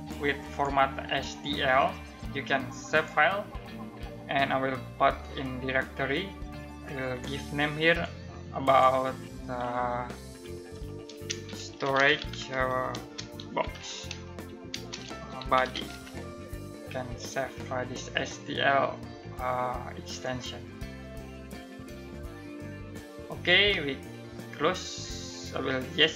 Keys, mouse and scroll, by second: 10.6-16.0 typing, 19.8 click, 25.6 click.